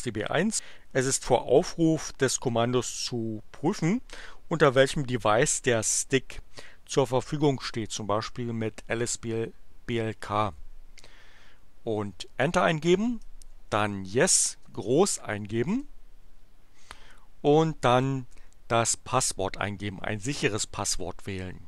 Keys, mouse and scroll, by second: 12.0 Return, 13.2-14.7 typing, 15.7 Return.